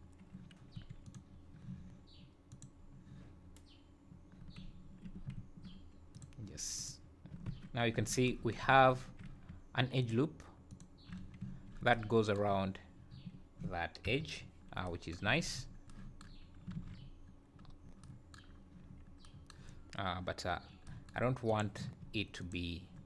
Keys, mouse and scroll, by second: 0.7 3, 1.0 click, 2.5 ctrl+click, 4.8 `, 5.3 `, 6.1 click, 6.7 ctrl+click, 7.5 Tab, 8.0 Tab, 8.6 scroll up 4, 9.0 `, 10.0 alt+click, 10.8 alt+click, 11.2 scroll down 4, 13.7 scroll down 2, 14.0 KP_1, 14.3 scroll up 5, 15.2 z, 15.6 scroll up 2, 16.4 scroll down 2, 16.7 alt+a, 16.9-17.4 scroll up 2, 17.6-18.0 scroll down 1, 18.8 scroll down 2, 19.6 scroll up 3, 21.4 click, 22.4 ctrl+click.